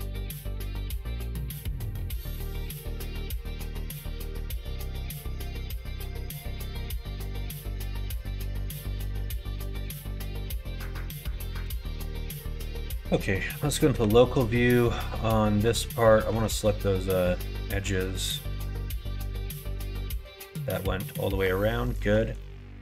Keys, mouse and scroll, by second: 0.0 middle click, 1.1 middle click, 2.2-4.3 middle drag, 4.6 middle click, 5.9 middle click, 6.2 Tab, 6.6 click, 6.8-9.2 middle drag, 9.8 middle click, 10.4 click, 10.8 shift+middle click, 11.4 middle click, 13.8 /, 15.1 middle click, 16.2 Tab, 17.0 middle click, 17.3 2, 18.1 alt+click, 18.7-21.0 middle drag, 21.7 alt+shift+click, 22.3 middle click.